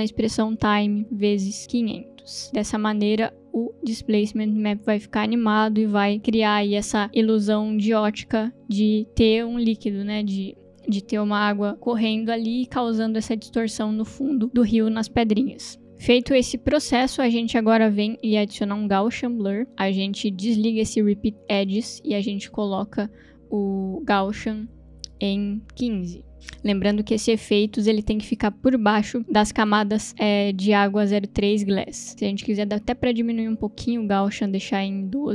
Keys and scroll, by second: 0.0-3.2 typing, 18.5 ctrl+space, 18.5-19.6 typing, 19.7 Return, 25.8 5, 25.9 Return, 34.8-35.3 typing.